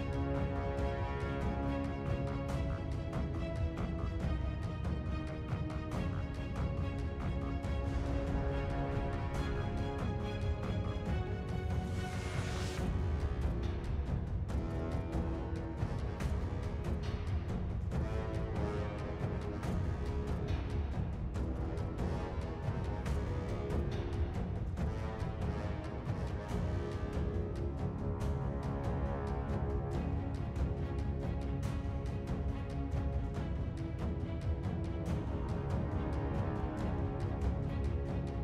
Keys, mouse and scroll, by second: 5.6 scroll up 2, 6.9-7.4 scroll down 4, 7.9 scroll up 1, 8.6 scroll down 4, 13.0 double click.